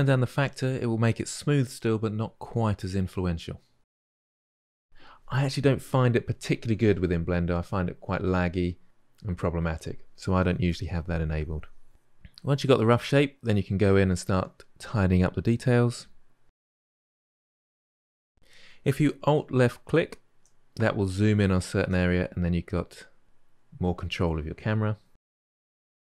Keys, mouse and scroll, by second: 4.5-6.2 drag, 6.4-7.3 middle drag, 7.3 drag, 7.5-8.1 ctrl+shift+middle drag, 8.1-8.5 drag, 8.8-9.1 drag, 9.1-9.5 ctrl+shift+middle drag, 9.5-9.9 drag, 9.9 middle click, 10.0-11.2 drag, 11.2 middle drag, 11.4 click, 12.1 shift+middle drag, 12.3 click, 12.8 shift+middle click, 13.7 click, 14.4 middle click, 14.9-15.4 drag, 15.4 middle drag, 15.6 click, 16.4-16.9 middle drag, 17.1 click, 17.6-20.0 ctrl+shift+middle drag, 20.7-23.7 ctrl+middle drag, 23.7-25.4 click, 24.6 click, 25.2 click, 25.5 ctrl+middle click, 25.7 click.